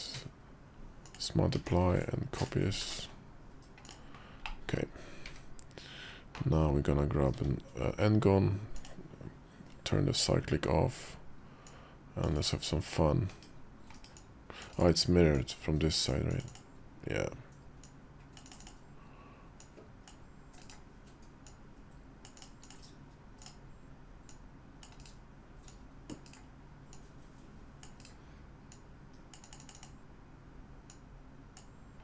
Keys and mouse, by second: 1.3 alt+x, 2.2 click, 3.6 click, 4.2 middle click, 4.5 click, 5.1 `, 7.1 d, 8.5 click, 11.4 click, 13.0 /, 13.1 KP_5, 13.7 /, 14.0 KP_5, 14.1 click, 15.1 click, 17.6 click, 19.3 click, 21.2-22.2 drag, 24.0 click, 25.5 click, 26.7 click, 28.5 click, 30.6 click.